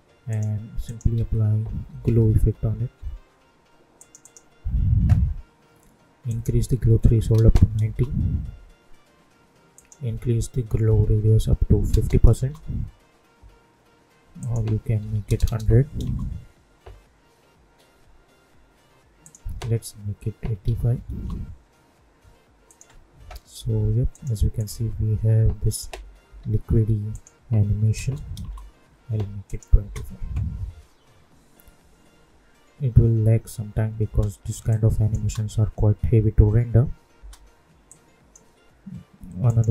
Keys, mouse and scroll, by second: 1.1 ctrl+a, 1.6-3.0 typing, 3.9 click, 7.8 Return, 9.7 click, 12.3 Return, 14.3 click, 16.0 Return, 19.2 click, 21.1 Return, 22.6 click, 26.2 t, 27.1 click, 28.3 Return, 29.4 click, 29.8 space, 34.0 space, 34.6 click, 35.1 space, 37.8-39.4 drag, 39.4 right click.